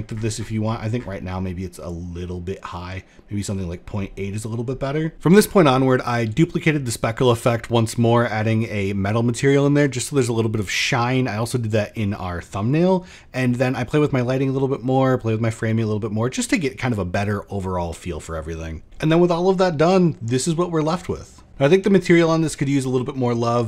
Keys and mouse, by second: 0.2 middle click, 1.3-3.0 drag, 5.1 click, 6.1 shift+click, 6.1-6.4 shift+middle drag, 9.0-10.2 drag, 10.7 click, 13.1-17.6 drag.